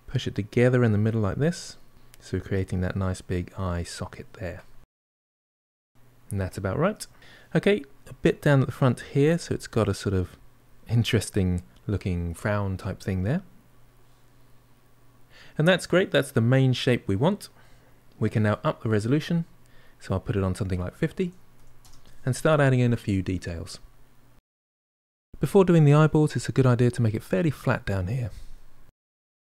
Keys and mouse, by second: 2.7 middle click, 3.4-5.3 drag, 5.3-7.2 middle drag, 8.0-11.0 drag, 11.0-13.2 middle drag, 13.2 click, 14.1-15.2 middle drag, 15.3-18.4 middle drag, 19.1-22.2 drag, 23.6-24.9 middle drag, 25.0-26.2 middle drag, 27.3-28.3 shift+middle drag, 28.3-29.5 drag.